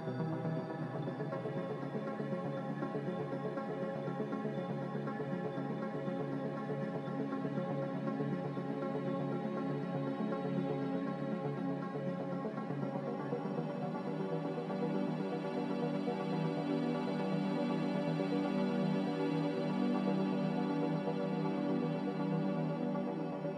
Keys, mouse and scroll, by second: 21.6-22.0 typing, 23.1 x.